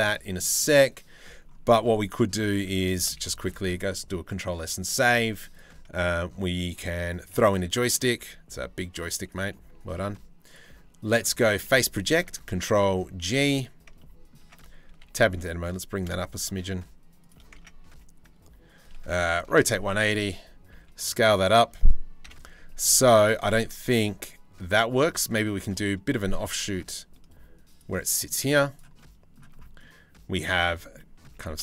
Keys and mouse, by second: 1.3 middle click, 2.2 middle click, 2.6 shift+middle click, 3.8 ctrl+s, 7.8 s, 10.2 click, 11.5 g, 13.3 g, 13.6 click, 14.0 Tab, 14.5 a, 14.7 g, 17.3 Tab, 18.5 r, 20.4 s, 21.9 KP_7, 22.5 z, 23.3 g, 26.0 g, 27.6 drag, 28.1 z, 28.6-29.0 middle drag, 29.4-30.3 middle drag, 30.6 middle click, 31.0 g.